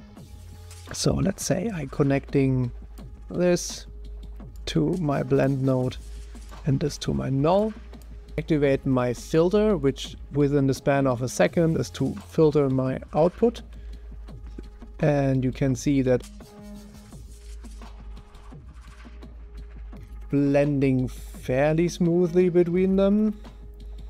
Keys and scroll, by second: 8.3 0, 13.7 o, 17.1 0, 18.2 0, 19.4 0, 22.1 0.